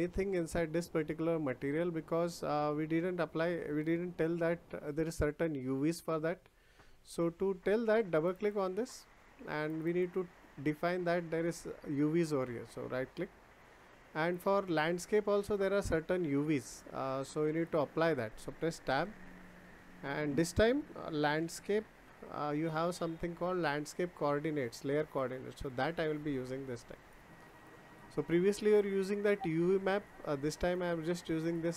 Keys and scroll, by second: 18.8 Tab.